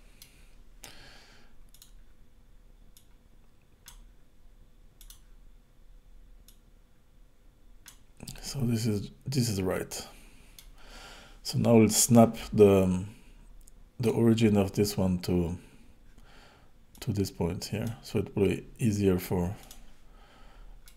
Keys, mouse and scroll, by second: 1.8 click, 2.9 click, 5.0 click, 6.4 click, 8.5 middle click, 14.0 click, 16.9 click, 19.6 click, 20.2-20.8 scroll down 6, 20.8 middle click.